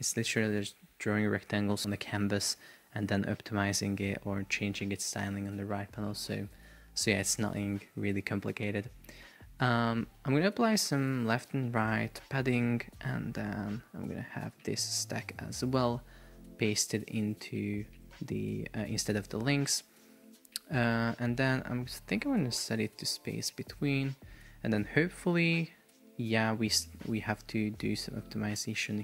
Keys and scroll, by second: 1.9 BackSpace, 12.1 Return, 15.6 super+x, 18.0 shift+super+v.